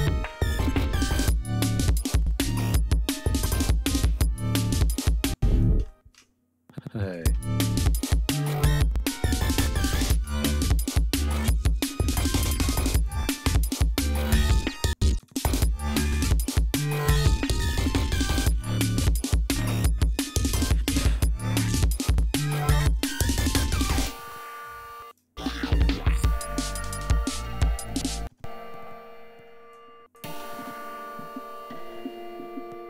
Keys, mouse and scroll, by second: 0.3 ctrl+scroll down 2, 0.7 ctrl+scroll up 2, 4.9 space, 5.0 click, 5.8 alt+shift+Up, 7.1 click, 7.3 space, 9.3 ctrl+scroll down 2, 9.7 ctrl+scroll up 2, 12.9 click, 13.8 alt+shift+Up, 14.8 space, 15.1 click, 15.5 ctrl+scroll up 2, 17.2 click, 18.0 alt+shift+Up, 23.2-23.6 ctrl+scroll down 4, 24.9 space, 25.1 click, 25.8 ctrl+scroll up 2, 26.8 ctrl+scroll down 2, 27.3 ctrl+scroll up 2, 27.8 ctrl+scroll down 2, 28.3 ctrl+space, 29.4 click, 30.0 space, 31.4 scroll up 2.